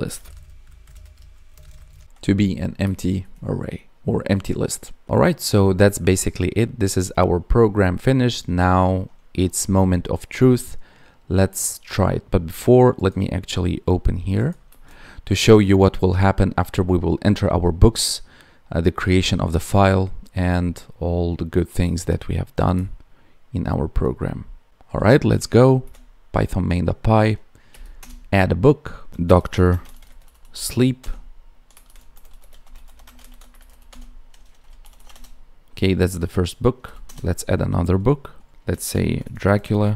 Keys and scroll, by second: 1.1 Tab, 1.5 space, 1.7 space, 1.9 ctrl+s, 2.1 Down, 2.8 Escape, 3.1 Down, 14.6 ctrl+s, 25.2 Up, 29.6 space, 32.9 space.